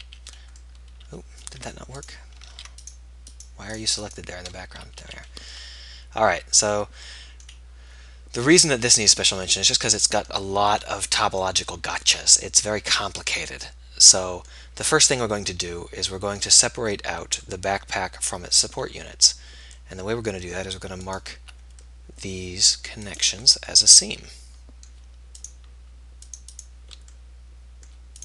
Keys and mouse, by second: 0.3 f, 2.7 ctrl+z, 5.2 f, 22.5-25.0 middle drag, 25.8-27.5 right drag, 27.7 middle click.